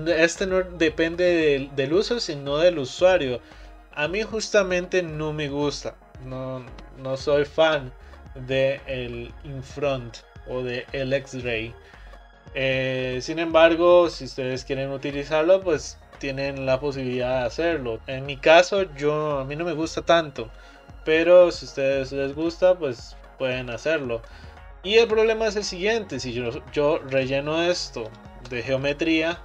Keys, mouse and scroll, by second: 22.7-27.2 middle drag, 27.2 click, 28.1 shift+click.